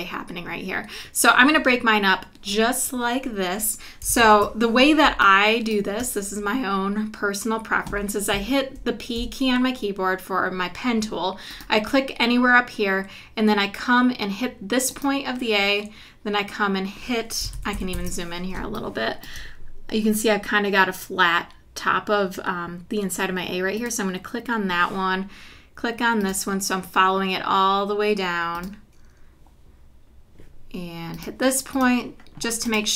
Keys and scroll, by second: 4.2 super+=, 5.1 space, 9.2 p, 17.5 super+=, 18.6 space.